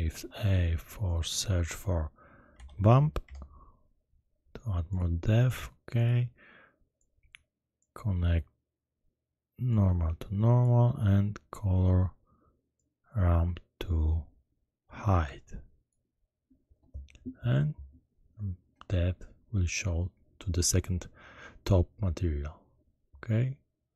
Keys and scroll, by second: 0.1 shift+a, 2.5 b, 2.6 u, 2.9 m, 3.2 p.